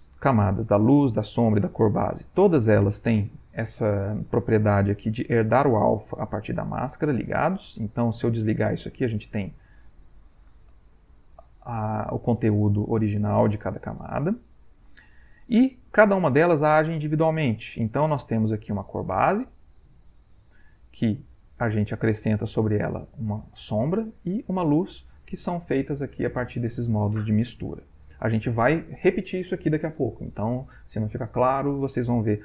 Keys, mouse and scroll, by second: 1.2 click, 7.0 click, 7.4 click, 8.3 click, 13.9 click, 14.5 click, 17.4 click, 17.8 click, 21.0 click, 22.1 click, 24.5 click.